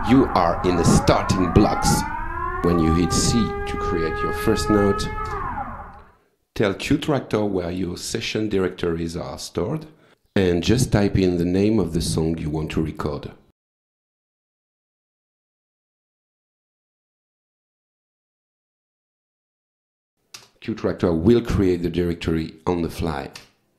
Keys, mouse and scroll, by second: 2.0 click, 4.1 c, 6.4 click, 8.1 click, 9.0 click, 13.9-16.5 typing, 17.4 ctrl+c, 18.2 shift+Tab, 19.4 ctrl+v, 20.4 Return, 23.4 Return.